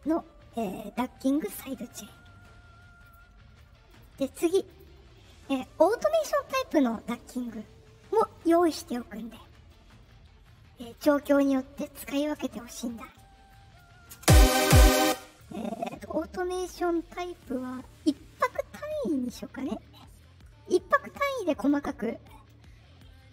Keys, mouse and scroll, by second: 1.4 click, 3.0 click, 3.8 click, 4.6 click, 7.5 middle click, 9.3 middle click, 11.1 right click, 14.1 space, 14.9 space, 20.3 middle click.